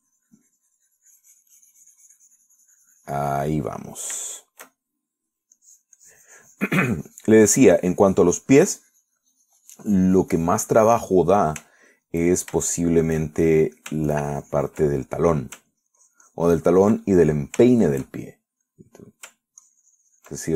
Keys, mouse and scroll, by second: 0.6-4.9 drag, 5.0 middle click, 5.5 shift+middle click, 6.0 shift+middle click, 6.8-13.5 drag, 12.9 shift+right click, 13.4 shift+right click, 13.9-15.1 shift+middle drag, 15.3 ctrl+shift+click, 16.2 ctrl+middle click, 17.0-18.3 ctrl+drag, 18.3 ctrl+middle click, 18.9-20.5 ctrl+shift+middle drag.